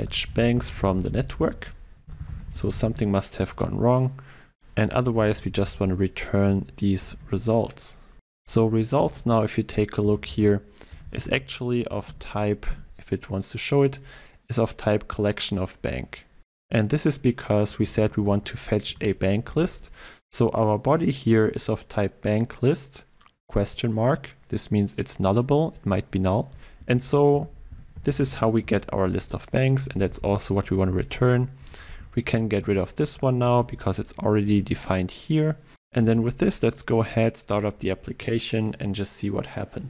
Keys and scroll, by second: 7.1 ctrl+w, 9.1 ctrl+space, 19.7 ctrl+space, 26.5 Return, 36.0 ctrl+s, 37.5 shift+F10.